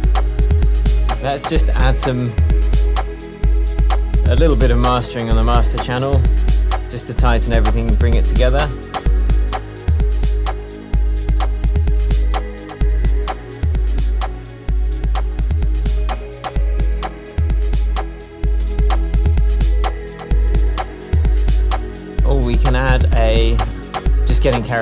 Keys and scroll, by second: 19.8 Return.